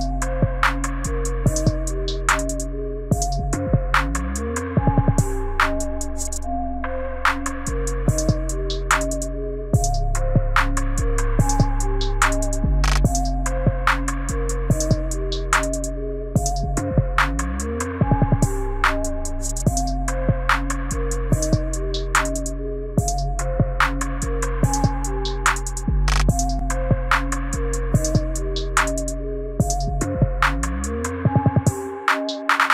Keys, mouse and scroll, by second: 1.5 i, 2.7 Right, 3.0 Right, 3.2 Right, 3.5 Right, 4.4 click, 12.4 Right, 12.7 Right, 13.0 Right, 14.0 click, 16.6 i, 17.5 Right, 17.8 Right, 18.2 Right, 19.1 click, 24.4 Right, 24.6 Right, 25.9 click, 27.9 i, 28.9 Right, 29.3 Right, 30.7 click.